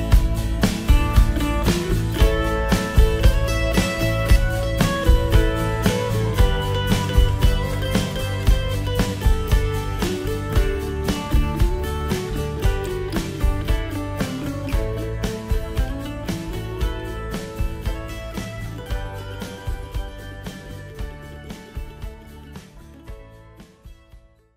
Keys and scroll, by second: 2.5 ctrl+z, 10.9 ctrl+e.